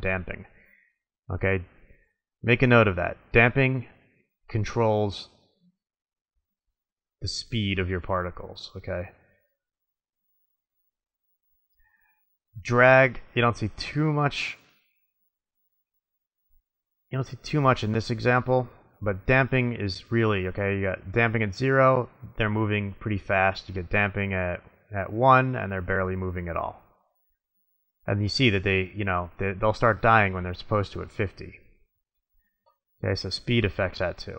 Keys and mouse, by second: 3.9-5.4 drag, 5.4 middle click, 12.6-14.4 drag, 19.5-20.7 drag, 21.4-22.9 middle drag, 24.4 middle click, 33.4-34.3 drag.